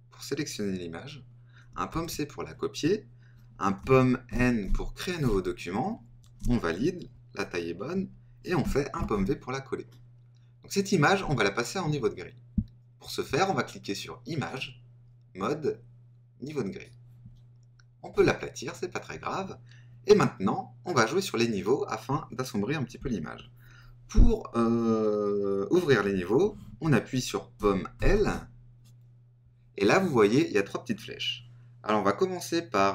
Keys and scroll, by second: 1.9 super+c, 4.3 super+n, 6.4 Return, 8.9 super+v, 27.9 super+l.